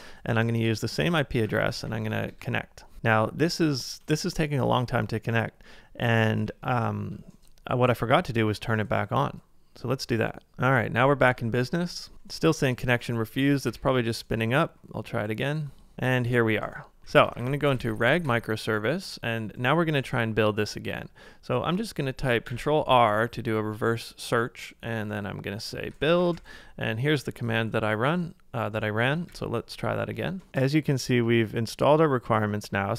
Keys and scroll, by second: 0.0 Page_Up, 1.5 ctrl+a, 1.6 j, 2.3 Return, 6.4 super+Tab, 10.5 super+Tab, 11.2 ctrl+c, 13.3 Up, 13.7 typing, 17.0-17.7 typing, 22.5 ctrl+r, 25.7-26.7 typing.